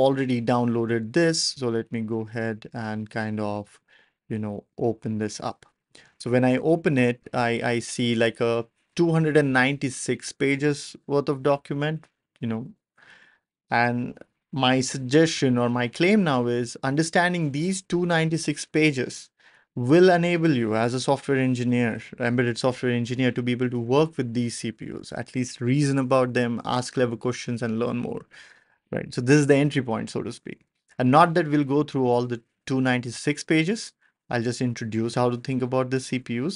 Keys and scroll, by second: 11.4 ctrl+alt+super+p.